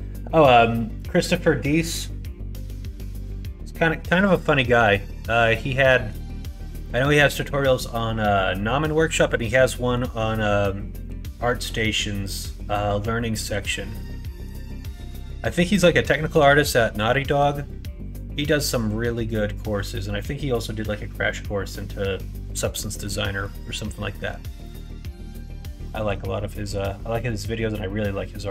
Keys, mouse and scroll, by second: 5.6 middle click, 6.8 middle click, 9.2 middle click, 13.9 middle click, 15.7 middle click, 17.0 middle click, 23.0 middle click, 23.9 middle click, 24.6 middle click, 26.1 middle click.